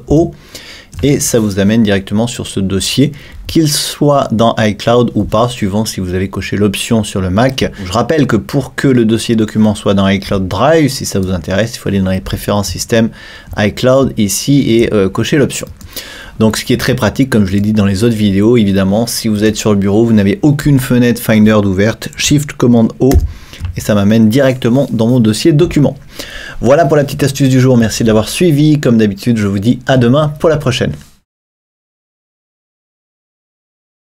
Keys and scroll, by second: 0.1 shift+super+o, 23.2 shift+super+o.